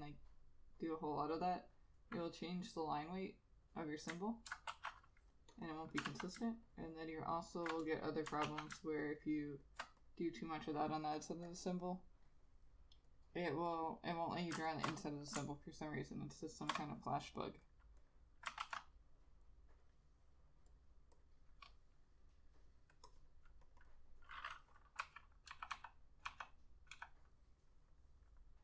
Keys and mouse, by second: 0.0 alt+click, 4.9 ctrl+z, 5.8 double click, 6.2 ctrl+a, 6.8 ctrl+alt+click, 8.6 ctrl+z, 9.1 ctrl+alt+click, 14.8 ctrl+shift+click, 16.5 ctrl+shift+click, 18.1 double click, 18.7 ctrl+z, 23.3 double click, 25.1-27.0 typing.